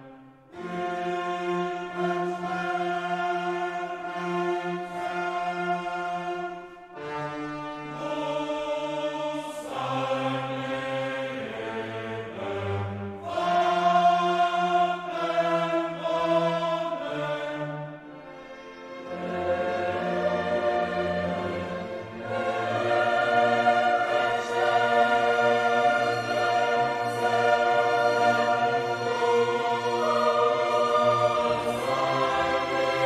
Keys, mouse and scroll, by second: 0.3 click, 2.0 click, 2.9 click, 4.2-4.6 scroll down 2, 4.8-5.4 scroll down 4, 8.0 click, 9.0 click, 11.6 click, 15.6 click, 17.5-19.6 drag, 25.2-26.4 drag, 27.0 click, 29.8 click, 32.4 click.